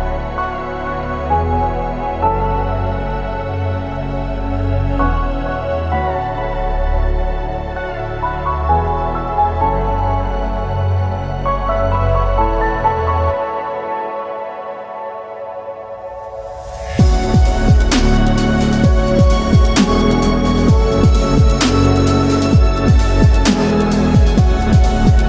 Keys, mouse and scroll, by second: 2.6 click, 7.0 b, 11.5 b, 15.0-16.2 drag, 18.3 click, 19.5 Tab, 20.1 click, 21.8 click, 23.5 click.